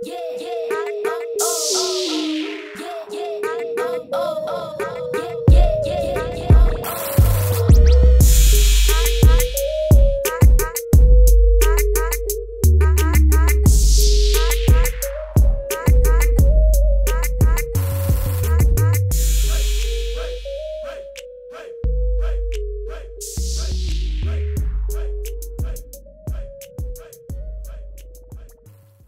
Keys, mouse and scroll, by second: 0.6 Right, 0.8 Up, 1.4 Left, 1.5 click, 1.6-3.1 typing, 2.0 click, 2.9 click, 3.8 Return, 4.1 Down, 4.4 Right, 4.7 click, 4.9 Left, 5.2 Down, 5.4 Up, 5.6 Left, 6.6 ctrl+Num_Lock, 6.9 click, 13.5 Return.